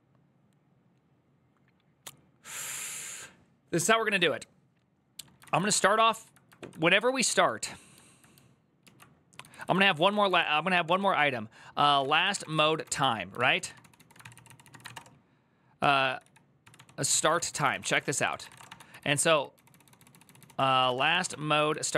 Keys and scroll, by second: 5.1-5.9 typing, 9.0-21.9 typing, 14.1 ctrl+c.